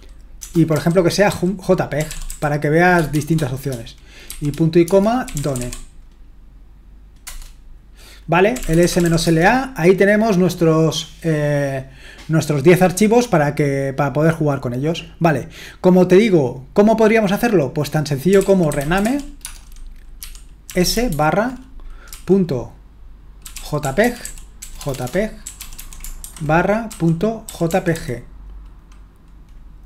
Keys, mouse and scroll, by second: 0.0-3.1 typing, 4.3-6.1 typing, 8.3-9.7 typing, 18.0-22.1 typing, 23.2-28.4 typing.